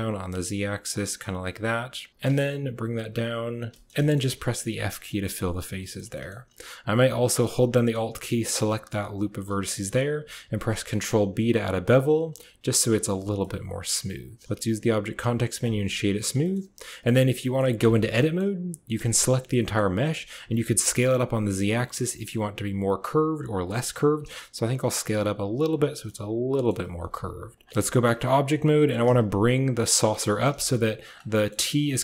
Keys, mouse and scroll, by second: 0.9 click, 1.0-2.0 middle drag, 2.1 g, 3.6 shift+middle click, 3.9 click, 4.6 f, 5.1 click, 6.0 click, 9.1 alt+click, 9.6 middle click, 10.3 ctrl+b, 13.0 Tab, 13.3-14.4 drag, 14.4 w, 16.3 shift+click, 17.3 drag, 17.6 Tab, 18.0 click, 18.8 a, 19.0 a, 19.5 click, 20.0 s, 20.3 a, 23.7 click, 24.0 s, 25.9 click, 26.8 s, 27.7 Tab, 27.8 click, 28.7 g, 30.0 click, 30.2 g, 31.2 middle drag, 31.7 click.